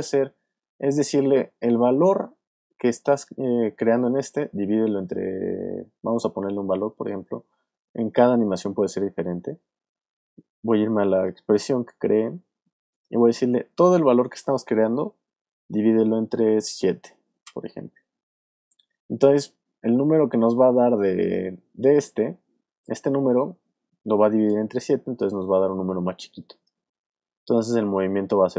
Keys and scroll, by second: 15.4 shift+7.